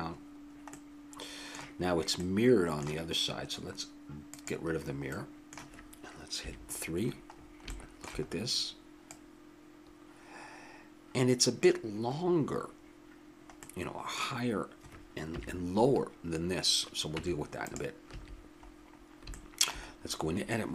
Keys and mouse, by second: 1.1-3.2 middle drag, 4.3-6.0 drag, 5.1 middle click, 6.4 KP_3, 9.8-10.8 middle drag, 13.6 middle click, 14.0 middle click, 15.3 KP_3, 17.1 Tab, 18.1 a, 19.3 middle click.